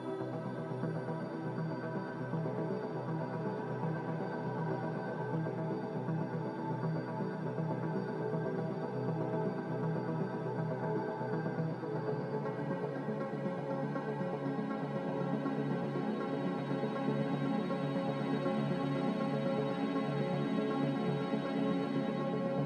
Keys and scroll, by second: 17.5 ctrl+j.